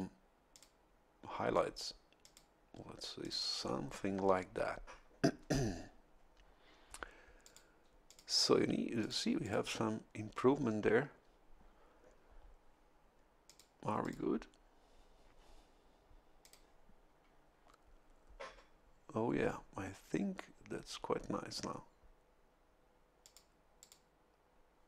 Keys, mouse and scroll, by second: 0.5 click, 2.2 click, 3.2 click, 7.4 click, 8.0 click, 9.0 click, 9.4 click, 13.4 click, 14.0 click, 16.4 click, 23.2 click, 23.8 click.